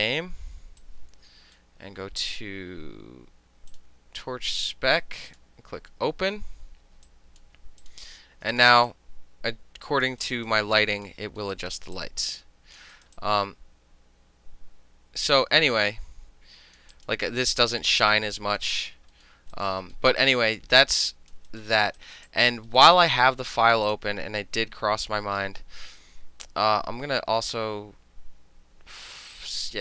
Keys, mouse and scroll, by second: 0.9-1.6 drag, 3.8 click, 5.4 click, 7.1-7.5 alt+drag, 7.5-7.9 alt+middle drag, 7.9 click, 8.0-8.6 middle drag, 8.6 click, 8.7-9.0 alt+middle drag, 9.0-10.1 alt+drag, 10.1 alt+middle click, 10.3 alt+right click, 10.5 alt+middle click, 10.8-11.1 alt+drag, 11.1 alt+middle click, 11.5 alt+middle click, 11.6 alt+right click, 11.8 alt+middle click, 12.0 alt+click, 12.9 alt+middle drag, 13.0 alt+right drag, 13.1 alt+middle click, 13.2-16.8 alt+drag, 16.8 alt+middle drag, 17.0 alt+click, 17.1 alt+middle click, 17.4 alt+scroll up 2, 17.5-18.1 alt+middle drag, 18.1 alt+click, 18.7 alt+middle drag, 18.8 alt+right click, 18.9 alt+middle drag, 19.2 alt+scroll up 2, 19.3-19.6 alt+middle drag, 19.6 alt+right click, 19.7 alt+middle drag, 20.0 alt+middle drag, 20.2 alt+right click, 20.3 alt+middle click, 20.4 alt+drag, 20.6 alt+middle drag, 20.9 alt+right click, 21.0 alt+middle click, 21.1 alt+drag, 21.4-21.8 alt+middle drag, 21.6 alt+right click, 22.0-22.8 alt+middle drag, 22.0 alt+right drag, 22.3 alt+drag, 22.9 alt+middle drag, 23.9 click.